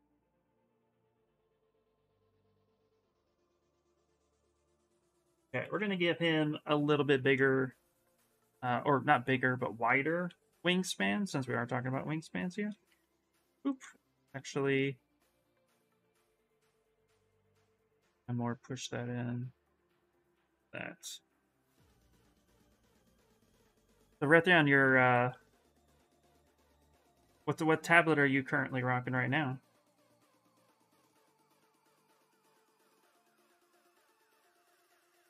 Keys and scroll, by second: 5.4 b, 6.0 v, 6.4 s, 7.6-8.4 typing, 10.0 s, 12.5 ctrl+z, 12.7 ctrl+z, 14.1 s, 22.6-25.0 typing, 35.0 s.